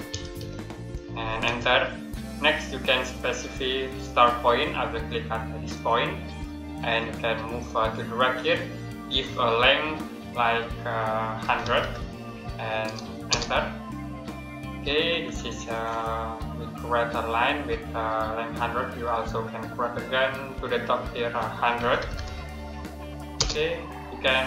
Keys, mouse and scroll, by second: 0.0-1.3 typing, 5.6 click, 11.1-12.2 typing, 13.1 Return, 14.7 scroll up 1, 16.3 middle click, 21.4-22.5 typing, 23.2 Return.